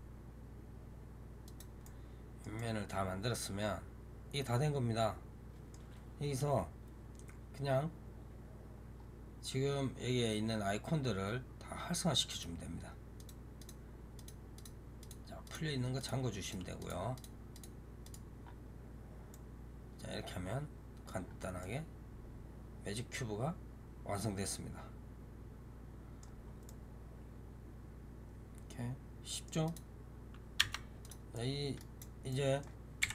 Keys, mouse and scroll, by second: 1.7-5.5 middle drag, 6.3-8.8 scroll down 1, 8.8-11.2 scroll up 2, 11.2-11.9 scroll up 1, 12.2 click, 13.0 click, 13.5 click, 14.0 click, 14.4 click, 14.9 click, 15.3 click, 15.9 click, 16.3 click, 16.7 click, 17.0 click, 17.4 click, 17.9 click, 18.3 scroll down 2, 19.2-21.1 middle drag, 21.1-21.5 scroll up 3, 21.5-24.5 middle drag, 26.3 scroll down 2, 26.5-29.5 middle drag, 29.5 click, 30.5 Tab, 30.9 click, 31.2-32.9 middle drag, 32.9 KP_7.